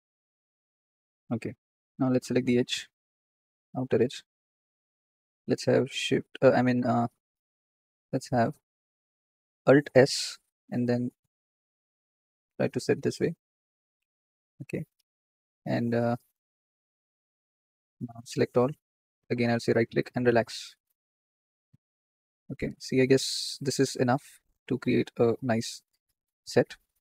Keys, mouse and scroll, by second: 2.0 alt+shift+click, 3.4 alt+shift+click, 6.9-8.1 middle drag, 7.5 z, 8.2-8.9 scroll down 1, 9.8 alt+s, 15.6 click, 16.2 click, 18.2 a, 18.8 scroll down 3, 19.4-20.6 right drag, 20.6 middle click, 20.9-21.3 scroll up 3, 21.3 shift+middle click, 22.1 Tab, 22.6-24.9 middle drag, 25.8-27.0 middle drag.